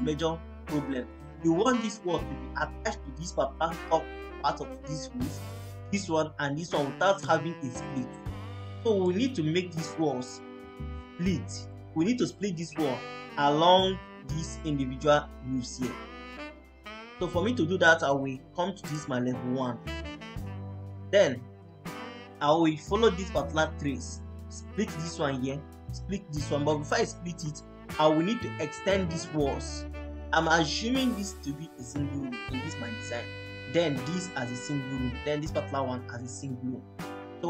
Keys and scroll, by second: 27.2 Escape.